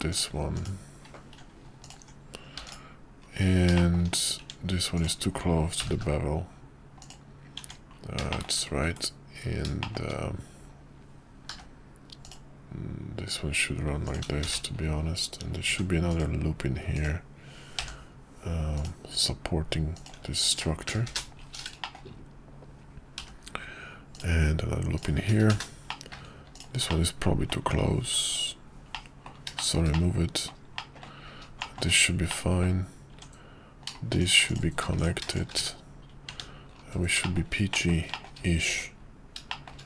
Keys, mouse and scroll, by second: 0.1 alt+click, 0.5 click, 2.6 x, 3.7 shift+middle click, 3.9 shift+scroll down 1, 4.4 Tab, 5.8 g, 7.5 Tab, 8.3 shift+middle drag, 9.8 shift+middle click, 11.5 k, 15.6 ctrl+r, 17.7 k, 21.8 shift+middle click, 23.2 k, 25.9 middle click, 26.5 alt+click, 26.9 middle click, 28.0 x, 28.9 middle click, 29.6 middle click, 29.7 scroll down 1, 29.9 scroll up 1, 30.0 middle click, 30.8 scroll up 1, 30.9 middle click, 31.6 shift+middle click, 31.8 scroll down 1, 32.3 middle click, 33.1 Tab, 34.2 click, 35.7 1, 36.3 Tab, 37.2 shift+middle click, 37.7 shift+middle click, 38.1 shift+middle click, 39.5 middle click.